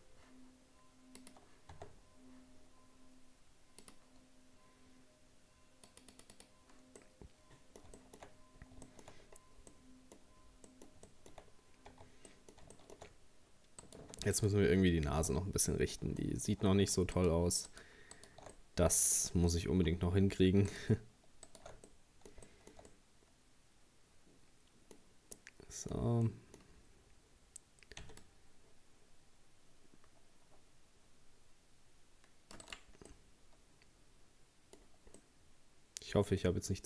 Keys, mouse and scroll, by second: 1.2 click, 1.7 Tab, 1.9-3.8 scroll down 2, 3.8-7.0 drag, 7.0-8.3 middle drag, 8.3-8.9 scroll up 1, 8.9 shift+middle click, 9.2-9.7 scroll down 3, 9.7 middle click, 10.3-10.7 scroll up 1, 10.7 middle click, 11.5-12.0 scroll up 2, 12.0 Tab, 12.3 middle click, 13.1-13.8 scroll up 1, 13.8 right click, 14.3 alt+shift+right click, 15.4-17.2 middle drag, 17.2 alt+shift+right click, 17.7 alt+shift+right click, 18.2 alt+shift+right click, 18.5-20.7 middle drag, 20.7 alt+shift+right click, 21.5 alt+shift+right click, 21.9-26.7 middle drag, 26.7-27.9 scroll up 2, 28.0 c, 33.1-34.8 middle drag, 34.8-35.2 scroll down 2, 35.2-36.8 middle drag.